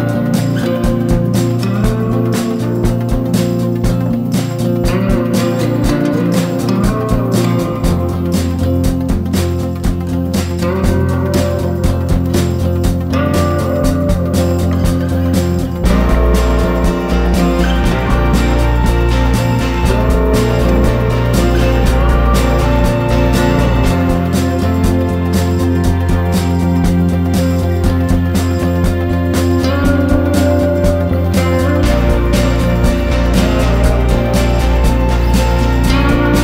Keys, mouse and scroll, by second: 13.8 right click, 14.4 click, 16.0 Left, 16.1 Left, 16.2 Left, 16.3 Left, 16.9 click, 18.3 ctrl+d, 18.7-23.7 drag, 23.7 right click, 24.4 click, 26.3 Left, 26.4 Left, 26.6 Left, 26.6 Left, 26.8 click, 27.6 Left, 27.8 Left, 28.0 click, 30.8 ctrl+d, 31.4 click, 32.0 ctrl+d, 32.3-36.4 drag.